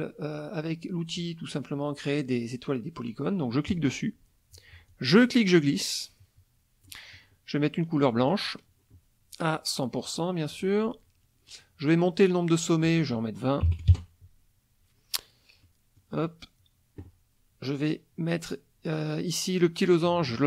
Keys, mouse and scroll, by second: 3.7 click, 4.9-7.0 drag, 8.2 click, 10.0 right click, 10.5 click, 12.9 click, 13.6 KP_2, 13.7 KP_0, 13.9 KP_Enter, 15.6 click, 19.9-20.4 drag.